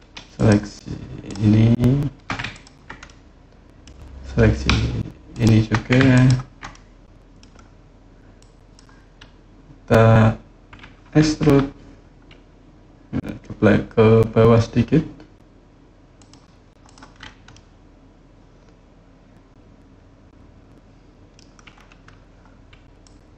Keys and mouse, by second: 2.3 ctrl+click, 2.9 click, 2.9 right click, 3.0 middle click, 3.1 click, 3.1 right click, 3.2 middle click, 5.1 shift+click, 5.9 ctrl+click, 6.5 middle click, 8.1 click, 11.2 e, 15.9 click, 16.6 click, 17.3-21.1 middle drag, 22.8 click.